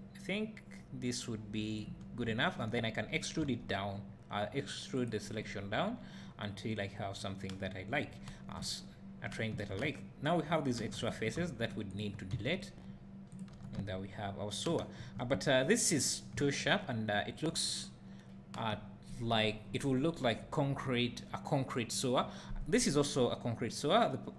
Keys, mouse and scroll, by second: 3.4 e, 8.8 `, 10.8 3, 11.0 click, 11.9 shift+click, 12.4 x, 13.5 Tab, 15.4-15.8 scroll up 2, 16.4 `.